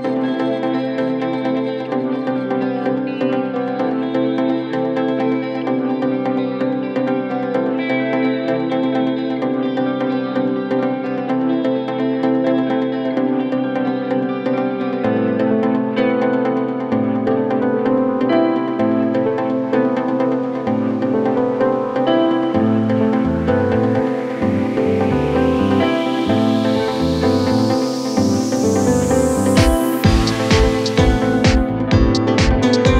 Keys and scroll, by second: 22.1 ctrl+z, 24.3 ctrl+z, 26.2 4, 29.9 3, 32.6 ctrl+d, 32.8 Escape.